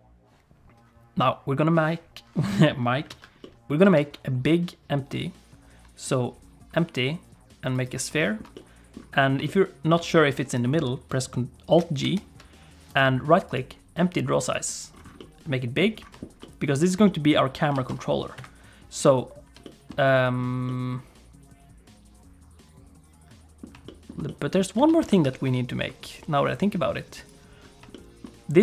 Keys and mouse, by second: 3.1 alt+a, 3.4 middle click, 4.0 shift+a, 8.2 shift+click, 8.5 middle click, 9.4 shift+click, 12.0 alt+g, 13.0-14.5 right drag, 15.2 middle click, 16.4 middle click, 17.0 middle click, 17.7 r, 19.6 shift+click, 20.6-23.6 middle drag, 23.8 shift+middle click, 24.2 middle click, 24.9 alt+a, 25.2 ctrl+s, 27.2 click, 27.9 shift+middle click.